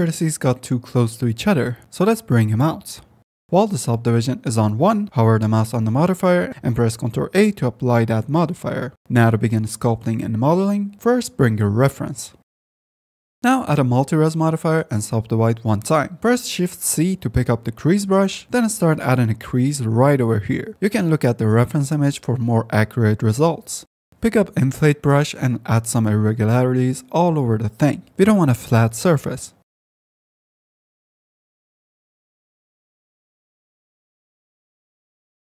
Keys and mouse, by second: 0.1 shift+click, 0.3-3.5 typing, 0.5 click, 2.3 click, 2.9 click, 3.2 click, 3.4 shift+middle click, 5.3 Tab, 6.3 click, 7.6 ctrl+a, 8.0 Tab, 13.4-14.9 drag, 17.9 f, 18.2 click, 21.7 ctrl+z, 24.2 click, 24.2 f, 25.4 click, 30.8 ctrl+shift+z, 33.3 shift+f, 33.5 shift+click, 34.5 shift+click.